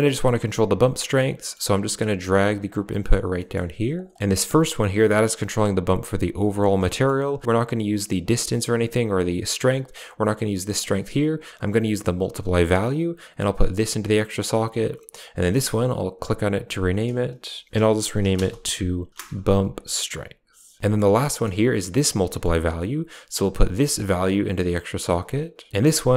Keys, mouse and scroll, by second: 1.3 middle click, 2.2 g, 2.8 middle click, 3.2 middle click, 3.6 g, 4.1 middle click, 4.1-6.5 drag, 6.8 middle click, 7.3 middle click, 8.1 click, 9.8 click, 12.7-14.1 drag, 14.3 click, 15.1 click, 15.6 click, 15.8-20.8 drag, 20.8 middle click, 21.2 middle click, 21.9 click, 22.1 middle click, 23.8-24.8 drag, 24.9 click, 25.7 click.